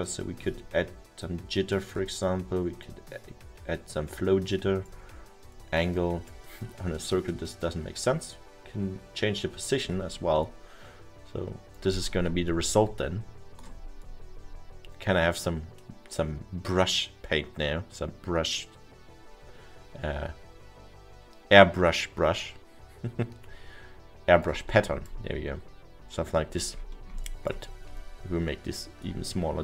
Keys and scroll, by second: 12.2 ctrl+z.